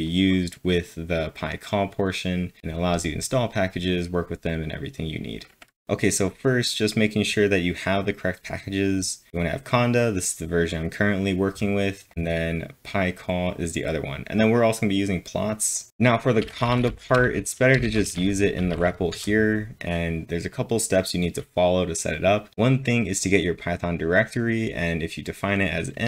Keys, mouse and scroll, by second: 2.2 scroll down 1, 5.0 click, 5.0 scroll down 1, 9.3 typing, 9.8 double click, 10.6-16.9 drag, 15.9 ctrl+l, 16.2-19.1 typing.